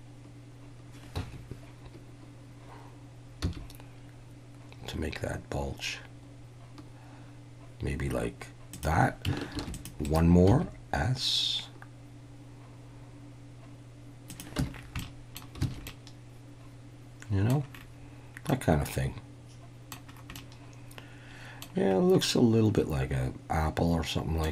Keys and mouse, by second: 1.1 Escape, 3.4 s, 8.7 click, 9.6 ctrl+r, 10.1 right click, 10.5 s, 14.3 click, 14.6 Tab, 15.0-15.4 middle drag, 15.7 alt+a, 15.9-17.5 middle drag, 18.5-19.9 middle drag, 20.4-21.6 middle drag, 22.2-24.5 middle drag.